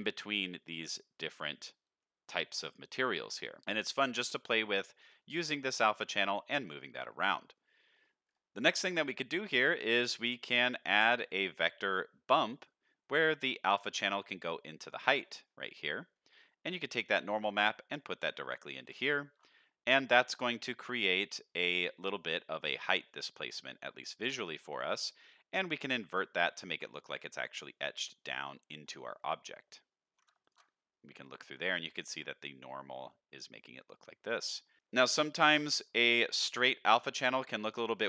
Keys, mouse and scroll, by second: 0.2 middle click, 2.6 middle click, 4.4 middle click, 4.9 middle click, 5.6 click, 6.8 middle click, 7.4 middle click, 7.9-8.9 scroll down 4, 8.9 click, 9.9 middle click, 10.3 shift+a, 12.6 middle click, 13.6-14.9 drag, 15.1-16.1 scroll up 4, 16.1 middle click, 16.8-17.9 drag, 18.3 middle click, 19.6 middle click, 20.1 shift+middle click, 20.4-21.8 scroll up 2, 22.0 middle click, 22.5 scroll down 2, 22.8 middle click, 23.3 scroll up 1, 23.7 shift+middle click, 24.1 middle click, 25.1 middle click, 26.0 click, 26.6 middle click, 27.0-27.3 scroll up 2, 27.5 scroll down 1, 28.7 scroll down 2, 29.1 middle click, 30.4 ctrl+shift+click, 30.9-31.3 scroll up 2, 34.4 middle click, 34.8 click, 36.2 shift+middle click, 37.6 click.